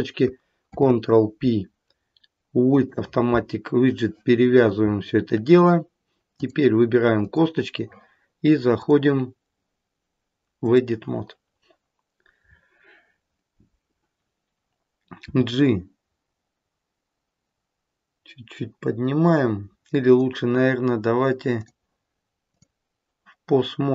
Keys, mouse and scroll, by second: 0.6 ctrl+p, 6.2 click, 7.1 click, 8.8 click, 15.1 g, 21.4 click.